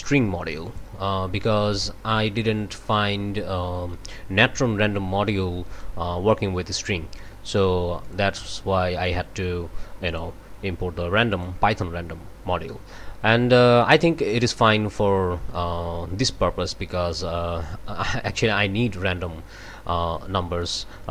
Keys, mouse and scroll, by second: 0.6 click, 2.1 click, 2.9-4.6 drag, 8.0 click, 9.0-10.4 drag, 11.3 click, 13.8 scroll down 1, 18.3 scroll down 1, 20.1-20.6 scroll up 2.